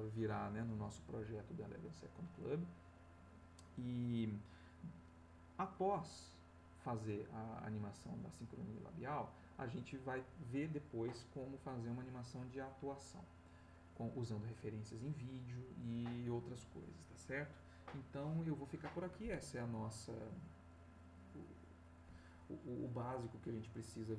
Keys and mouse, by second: 19.9-24.1 drag.